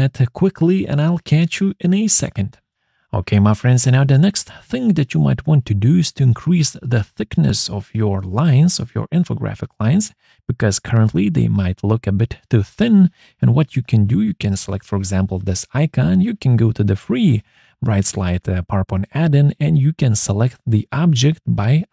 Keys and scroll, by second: 0.0-0.6 typing, 0.7 Return.